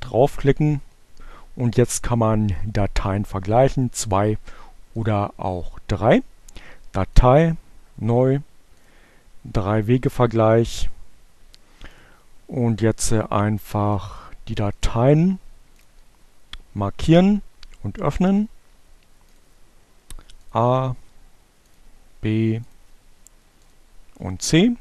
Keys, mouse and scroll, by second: 4.3 click, 4.7 click, 7.3-8.7 drag, 10.4-11.9 drag, 13.5-14.5 drag, 15.0 click, 17.7 click, 19.4 click, 20.7 click, 22.3 click, 23.4 click, 24.6 click.